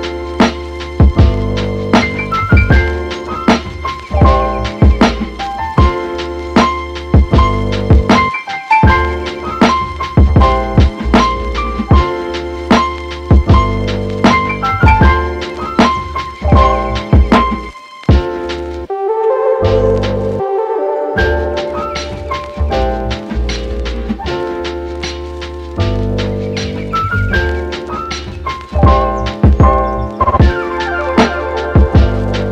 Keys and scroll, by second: 4.5 space, 8.2 t, 8.9 t, 9.6 t, 10.6 space, 16.8 super+z, 17.2 super+z.